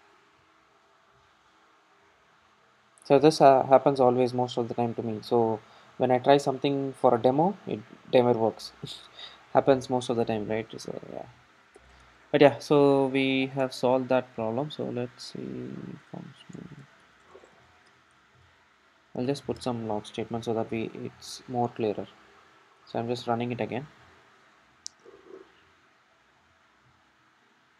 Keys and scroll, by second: 12.0 Tab, 13.7 Tab, 20.5 super+s, 21.6 super+r.